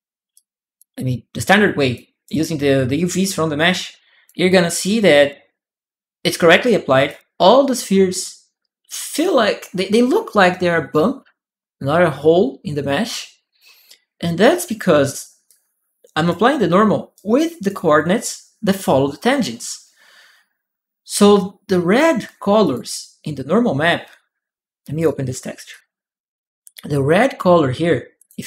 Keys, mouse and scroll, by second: 0.1 click, 1.2 click, 3.4 right click, 3.9 click, 5.1 right click, 6.0 click, 6.3 right click, 14.6-16.0 right drag, 15.2-17.5 drag, 16.9 right click, 22.4 click, 24.7 click, 25.5 click, 25.6 click, 27.9 click.